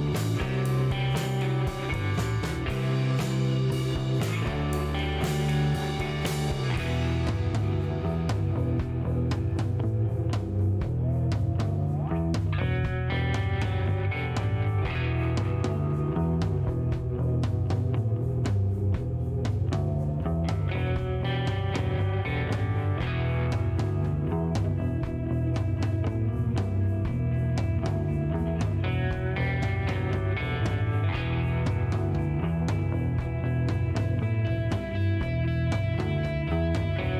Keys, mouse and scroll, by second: 1.1 click, 2.2 click, 3.5 click, 4.5-5.4 typing, 7.2-9.4 drag, 12.7 click, 16.6 click, 18.0 click, 18.4 middle click, 18.8 click, 19.6 click, 21.0 right click, 21.6 click, 22.5 click, 25.0 KP_3, 25.3 KP_Enter, 26.9-28.3 drag, 29.4 click, 32.3 click.